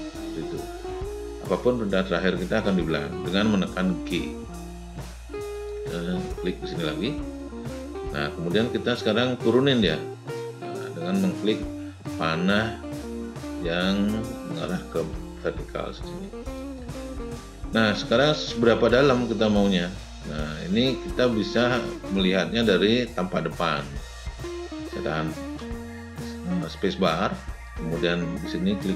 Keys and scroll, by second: 25.4 space.